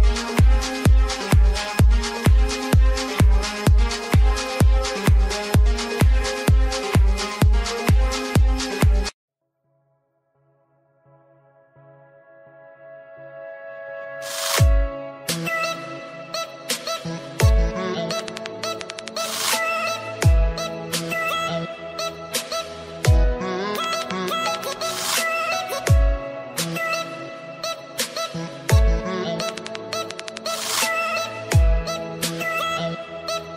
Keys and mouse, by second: 0.8 ctrl+y, 2.0 click, 2.8 click, 3.4 Return, 3.8 Return, 4.7 click, 5.8 click, 7.3 click, 9.9 click, 12.2 click, 17.8 Delete, 19.9 click, 21.9-26.6 typing, 26.9 click, 27.1 click, 28.9 click, 30.5 click, 31.0 click, 32.2 click.